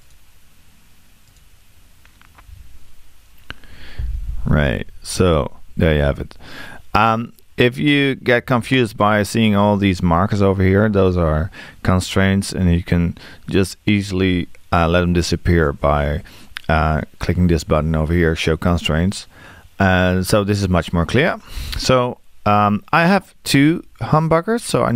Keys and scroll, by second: 2.5 6.